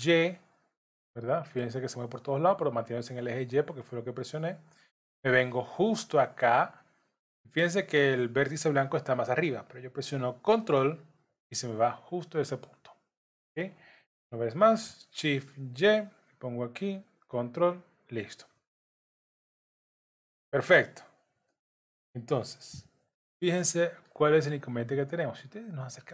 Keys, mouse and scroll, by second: 14.0 shift+d, 18.5-19.0 scroll down 2, 19.0 middle click, 20.3 z, 20.8-21.5 scroll up 4, 21.5 shift+middle click, 22.4-22.9 scroll up 2, 23.4 middle click, 24.1 scroll up 2, 25.0-25.6 scroll up 3.